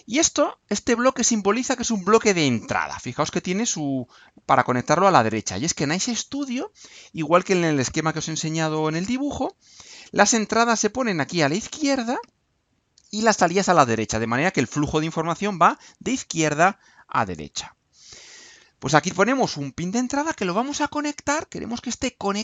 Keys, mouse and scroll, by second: 1.1 click, 20.0 click.